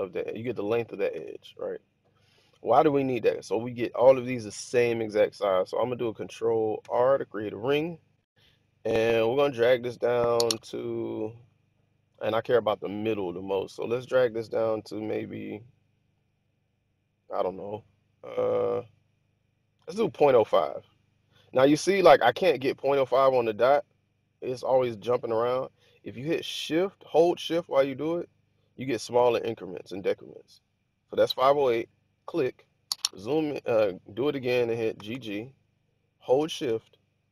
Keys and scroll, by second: 1.1 1, 6.7 ctrl+r, 34.8 g, 35.0 g.